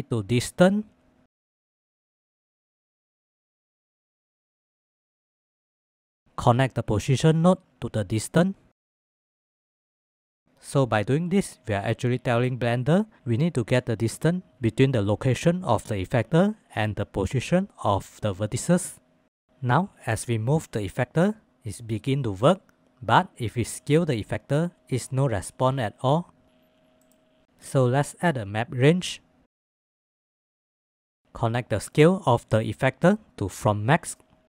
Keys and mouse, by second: 1.0-2.9 drag, 3.8-4.7 drag, 5.6 click, 6.4-9.4 middle drag, 10.1-22.8 middle drag, 23.0 ctrl+z, 25.9 ctrl+z, 26.4 ctrl+s, 30.7-34.5 drag.